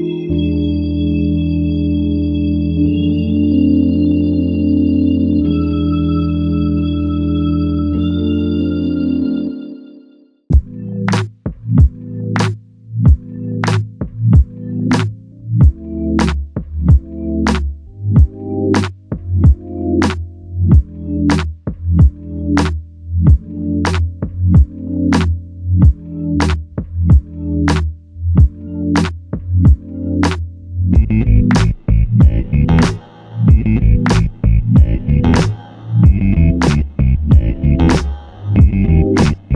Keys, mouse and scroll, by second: 0.0 ctrl+alt+click, 1.2 alt+click, 6.1 ctrl+click, 11.1 typing, 12.2 typing, 15.6 double click, 16.9 alt+click, 18.5 typing, 21.2 double click, 22.5 alt+click, 24.3 double click, 24.8 alt+click, 25.3 alt+click, 26.1 typing, 27.4 double click, 29.5-30.2 typing, 34.5 alt+click.